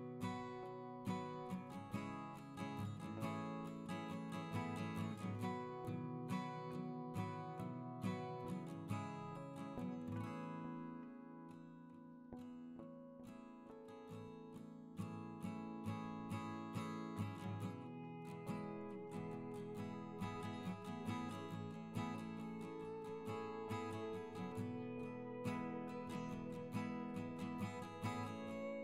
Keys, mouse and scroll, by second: 0.3 right click, 0.8 ctrl+z, 1.8 right click, 2.4 space, 3.4 ctrl+c, 4.0 space, 4.0 double click, 6.2 double click, 7.0 space, 8.4 double click, 9.4 ctrl+click, 9.4 ctrl+double click, 9.6 ctrl+space, 9.9 ctrl+click, 10.0 ctrl+double click, 10.1 ctrl+click, 10.4 ctrl+alt+double click, 10.6 ctrl+alt+double click, 10.9 ctrl+alt+double click, 11.2 space, 13.4 ctrl+space, 13.6 ctrl+click, 13.9 space, 14.1 ctrl+alt+click, 14.2 ctrl+alt+double click, 14.3 ctrl+alt+double click, 14.5 ctrl+alt+click, 15.1 space, 15.7 ctrl+alt+click, 16.0 space, 18.5 right click, 20.2 right click, 21.4 right click, 24.4 right click, 25.2 double click.